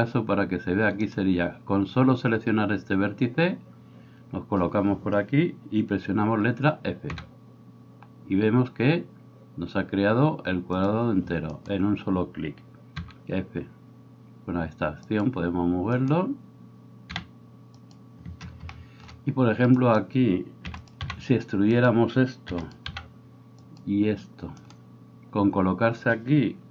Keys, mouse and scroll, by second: 0.0-1.1 middle drag, 1.1 right click, 1.2-11.6 middle drag, 7.2 f, 11.6 right click, 11.9-19.8 middle drag, 13.1 f, 17.2 f, 19.8 right click, 20.0-26.7 middle drag, 20.6 e, 21.0 g, 22.5 e, 22.9 g.